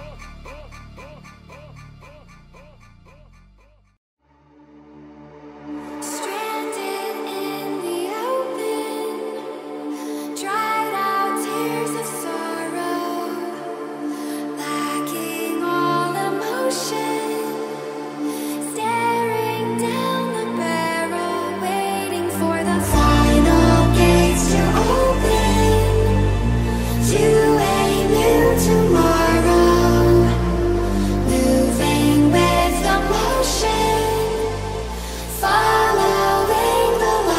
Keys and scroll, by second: 6.8 Menu, 8.6 space, 26.2 ctrl+z, 26.8 ctrl+z, 27.3 ctrl+z, 27.8 ctrl+z.